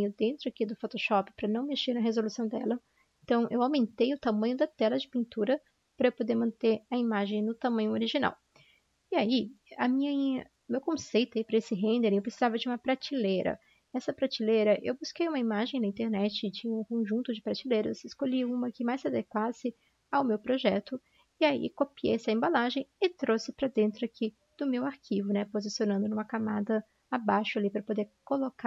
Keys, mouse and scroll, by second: 5.3 typing, 8.2 ctrl+0, 8.2 typing, 10.5 ctrl+0, 22.9 ctrl+v, 22.9 ctrl+c, 27.1-28.6 typing.